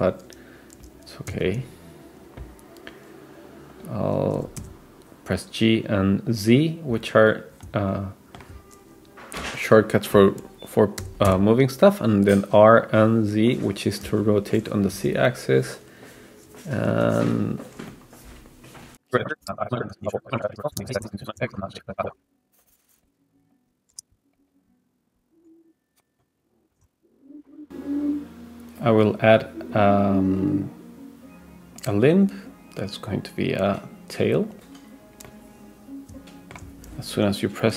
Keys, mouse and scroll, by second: 1.3 s, 4.4 g, 7.3-8.5 middle drag, 11.0 r, 14.1 s, 14.9 g, 16.3-16.9 scroll up 2, 16.9 g, 17.9-18.9 middle drag, 19.6 click, 19.9 click, 20.1 click, 20.7-25.1 typing, 21.5-21.9 scroll up 2, 21.9 click, 22.2 click, 22.5 click, 22.9 click, 23.3 click, 23.5 click, 23.8 scroll down 2, 23.9 shift+middle click, 24.0 click, 24.2 click, 24.6 click, 25.0 click, 25.4 middle click, 26.1 middle click, 26.1 scroll down 2, 26.7 shift+middle click, 26.7-27.1 scroll up 4, 27.1 click, 27.4 middle click, 27.4 scroll down 2, 28.8 click, 31.8-34.7 drag, 35.3-36.6 middle drag, 36.9-37.7 scroll down 5.